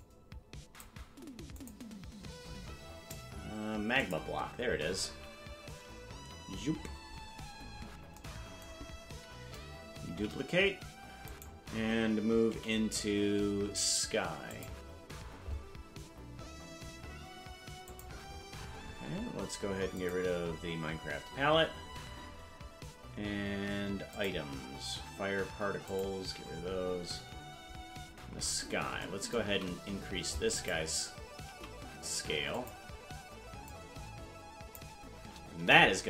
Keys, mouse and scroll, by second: 1.5 click, 2.4-2.8 scroll down 5, 4.0 click, 6.1 KP_Decimal, 6.8-7.3 scroll down 9, 7.7 scroll up 5, 10.6 shift+d, 12.5 m, 17.8 click, 18.2-19.8 scroll up 18, 20.3 click, 21.5-22.4 scroll down 12, 24.3 click, 26.1 click, 28.0-28.8 scroll down 11, 29.5 s, 33.6-34.8 drag, 35.6 KP_0.